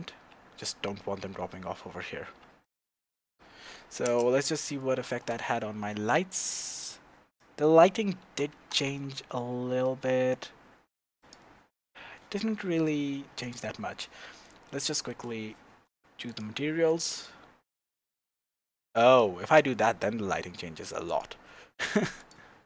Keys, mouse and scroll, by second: 0.2 Tab, 1.0 scroll down 1, 1.2 Tab, 1.8-2.3 scroll down 2, 2.3 Tab, 2.6 middle click, 3.0-3.6 scroll down 2, 3.6 middle click, 4.0 KP_0, 4.5-5.1 scroll up 2, 5.1 shift+z, 6.3-8.2 scroll up 1, 8.2 shift+z, 8.8 Tab, 8.8-11.3 middle drag, 11.3 click, 13.5 click, 14.4-16.3 shift+middle drag, 16.3 click, 21.2 click.